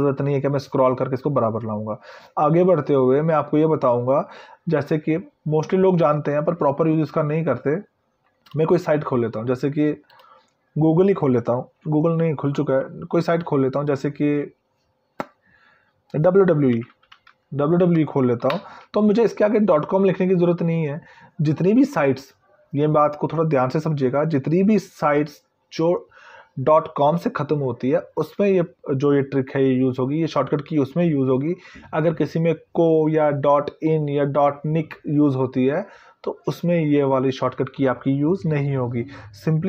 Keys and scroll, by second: 17.2 Delete.